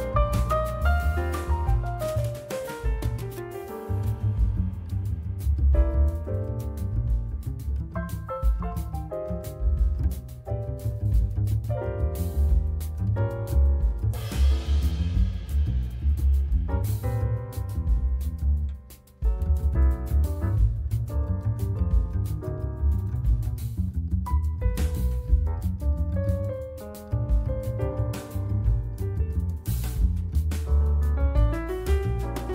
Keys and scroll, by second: 6.9 F3.